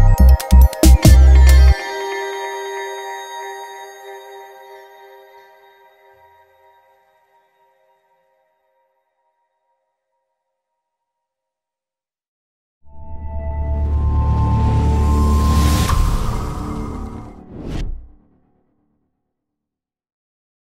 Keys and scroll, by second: 1.8 Return, 2.2-6.7 typing.